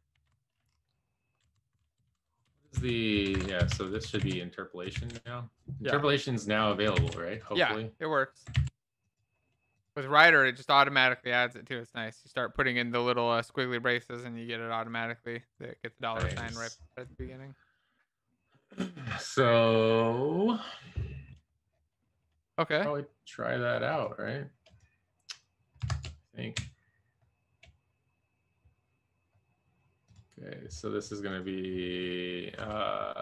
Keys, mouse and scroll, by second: 0.2 Right, 0.2 shift+4, 0.8 Right, 0.9 Right, 1.5 Right, 1.9-3.5 typing, 2.6 Right, 3.6 Left, 3.9 Left, 4.2 ctrl+v, 4.9 ctrl+z, 7.5 ctrl+c, 8.9 ctrl+c, 10.7 ctrl+s, 11.1 alt+shift+f, 11.9 ctrl+s, 14.8 Delete, 15.1 ctrl+s, 15.3 Right, 15.5 Right, 15.7 Right, 15.8 Right.